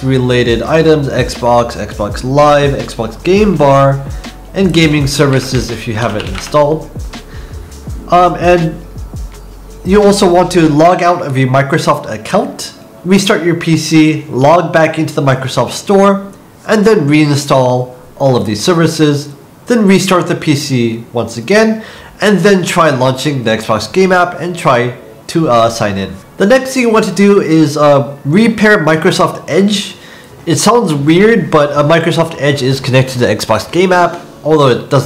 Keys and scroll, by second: 5.1-6.8 typing.